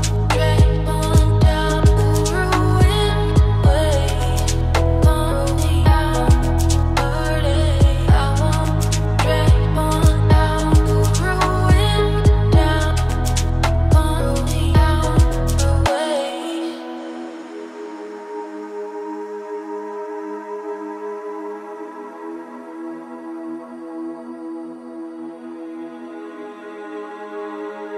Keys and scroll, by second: 9.7 ctrl+space.